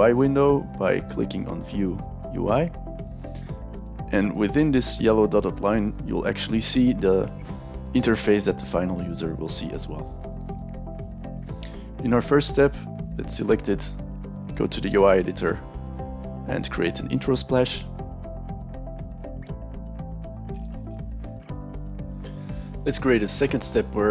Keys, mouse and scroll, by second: 2.4 click, 12.9 click, 15.5 click, 17.1 click, 18.3 click, 19.9 click, 20.8 v.